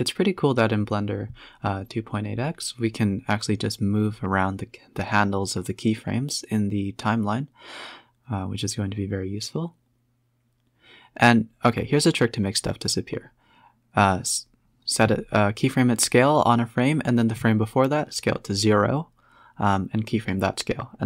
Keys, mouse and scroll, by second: 0.3 g, 1.3 click, 1.5 space, 2.2 a, 2.4 scroll down 4, 3.5 space, 4.2-5.1 drag, 5.1-5.9 scroll up 1, 5.9 click, 6.6 shift+click, 7.0 shift+click, 7.7 shift+click, 8.8 Right, 9.1 Right, 11.7 Left, 12.2 s, 15.0-17.8 typing, 17.5 Left, 17.6 Left, 19.1 Left, 19.3 Left, 19.5 Left, 19.7 Left, 20.0 Left, 20.8 Right.